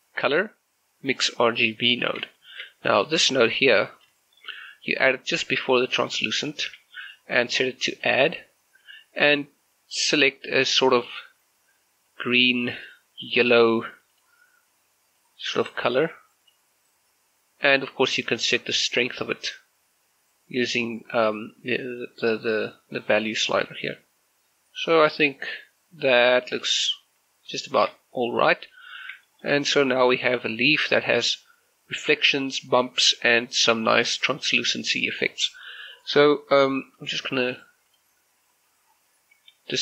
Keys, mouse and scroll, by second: 0.4 click, 2.4 shift+middle click, 3.2 g, 4.0 click, 4.2 shift+middle click, 4.8 g, 5.9 click, 6.4 shift+middle click, 7.1 click, 12.2-14.2 drag, 14.2-27.4 drag, 27.4 scroll down 1, 27.7 shift+middle click, 28.0 middle click, 28.9 scroll up 1, 29.3 shift+middle click, 30.6-31.0 scroll up 1, 31.0-34.4 middle drag, 38.0 click, 38.4 scroll down 1, 38.6 scroll up 1, 38.8-39.8 scroll down 1.